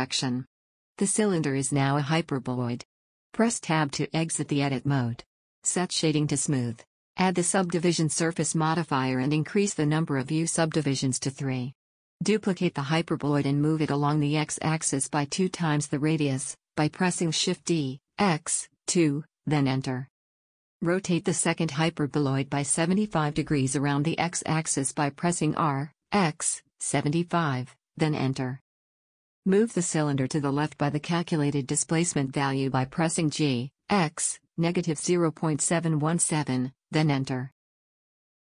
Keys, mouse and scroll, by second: 3.5 Tab, 5.8-9.0 drag, 10.4-12.0 middle drag, 12.8 shift+d, 16.5-18.7 middle drag, 18.7 click, 21.3 click, 21.8 r, 25.9 click, 30.2 g, 36.4-38.5 middle drag.